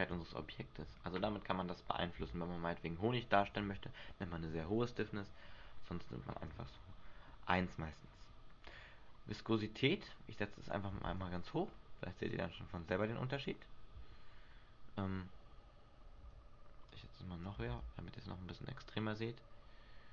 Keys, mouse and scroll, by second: 2.3 alt+a, 6.6 Escape, 9.5 click, 11.5 alt+a, 16.5 Escape, 17.0 click, 17.8 alt+a.